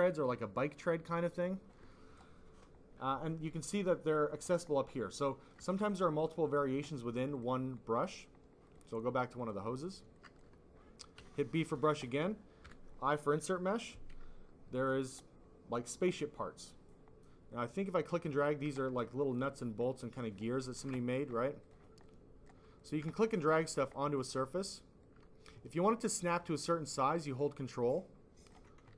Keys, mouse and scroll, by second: 0.2 click, 3.8 click, 5.7 alt+click, 5.8 click, 6.4 click, 7.3 click, 8.6 click, 8.8 click, 9.3 click, 10.2 alt+click, 11.1 b, 12.6 i, 14.7 click, 17.4 click, 18.4 alt+click, 18.7 click, 19.3 click, 19.4 click, 19.8 click, 20.6 alt+click, 20.9 double click, 21.6 double click, 22.0 double click, 22.8 alt+click, 23.0 click, 23.9 alt+click, 24.2 click, 25.0 click, 27.9 ctrl+click.